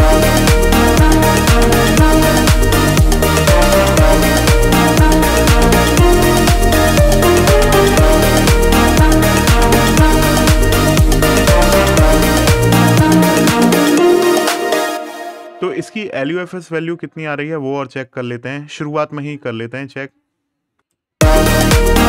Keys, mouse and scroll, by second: 0.7 scroll down 1, 2.2 scroll up 1, 4.1 click, 14.0 click, 18.1 click.